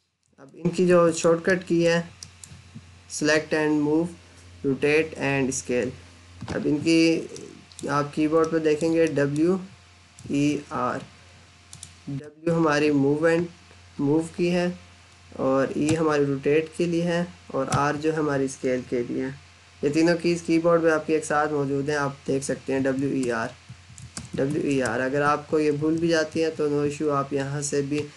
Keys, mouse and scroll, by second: 0.7 Escape, 1.0 click, 1.5 alt+middle click, 7.2 middle click, 8.5 alt+middle click, 9.2-10.4 typing, 11.5 click, 12.0 w, 14.2 typing, 15.5-16.2 typing, 17.5 typing, 22.3-26.6 typing.